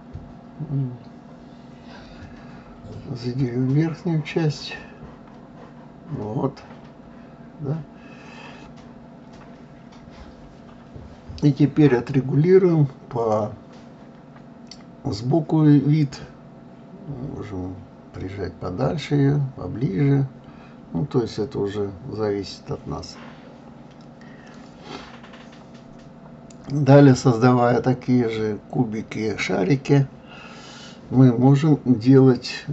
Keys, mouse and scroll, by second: 2.8 click, 4.7 g, 9.9 click, 10.4-13.4 middle drag, 27.5-30.5 drag, 31.3 g.